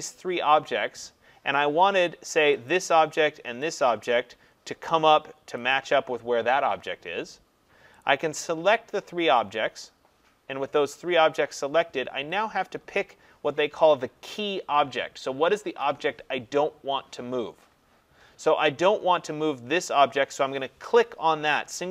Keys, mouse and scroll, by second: 2.7 click, 3.8 click, 5.8 click, 8.1 click, 9.4 click.